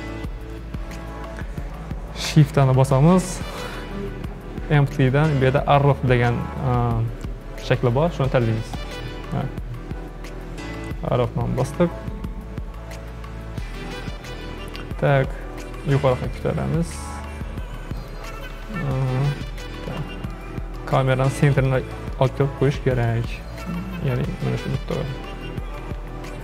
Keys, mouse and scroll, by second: 2.4 shift+a, 12.8-14.7 scroll up 1, 14.7-15.8 scroll up 1, 15.8 g, 18.6 KP_7, 19.4-19.7 scroll up 4, 19.7-21.0 shift+middle drag, 21.0-21.3 scroll up 3, 21.3-23.2 shift+middle drag, 23.2-24.2 scroll up 8, 24.2-26.0 shift+middle drag, 26.0 KP_3.